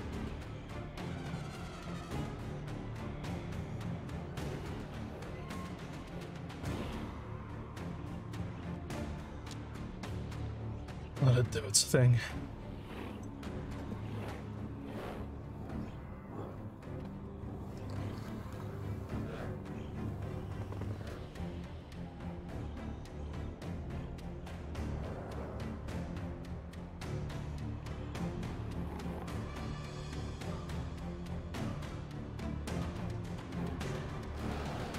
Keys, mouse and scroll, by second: 3.0 z, 4.5 click, 5.6-6.7 drag.